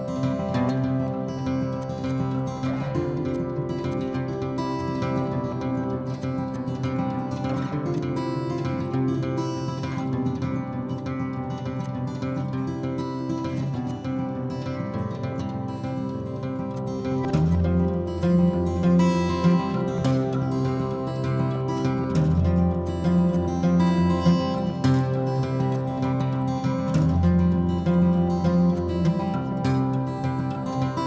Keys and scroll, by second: 6.9 h.